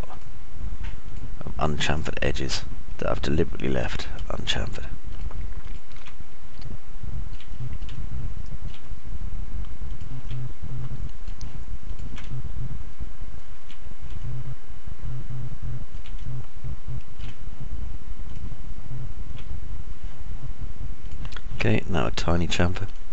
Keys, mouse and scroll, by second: 4.7 ctrl+right click, 6.7 ctrl+right click, 7.7 alt+click, 7.7 alt+middle click, 7.7 alt+right click, 7.7-8.3 alt+scroll up 1, 8.7 click, 8.7 middle click, 8.7 right click, 9.0 alt+click, 9.0 alt+middle click, 9.0 alt+right click, 14.2 alt+middle click, 15.3-17.0 alt+middle drag, 17.3-18.3 alt+middle drag.